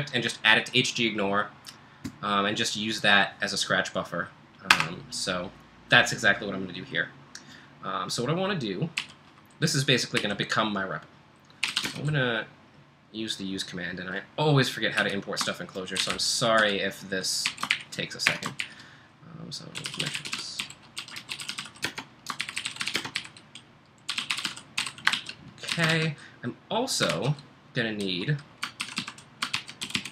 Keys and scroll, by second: 4.7 Return, 9.0-12.3 typing, 14.8-26.4 typing, 27.1 ctrl+l, 28.8 ctrl+w, 29.0-30.1 typing, 29.5 ctrl+j.